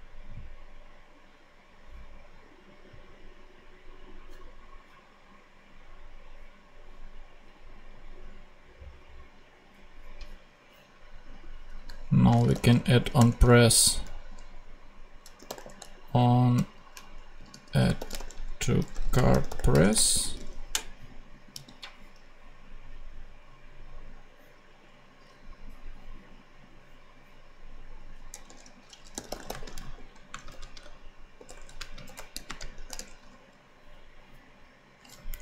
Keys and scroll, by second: 12.4 o, 13.1 Return, 15.3-20.4 typing, 21.5 super+c, 28.2 Return, 29.1-32.7 typing, 32.9 shift+Return, 35.3 Down.